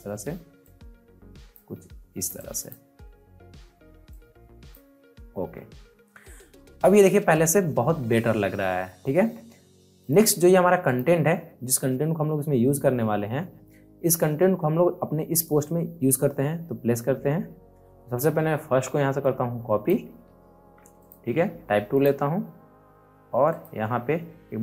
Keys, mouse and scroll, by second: 6.2 alt+scroll down 1, 6.5 alt+scroll up 1, 7.0 alt+scroll down 1, 8.6 alt+scroll up 1, 9.1 alt+scroll down 1, 10.0 click, 19.1-20.7 drag, 20.5 c, 21.0 click.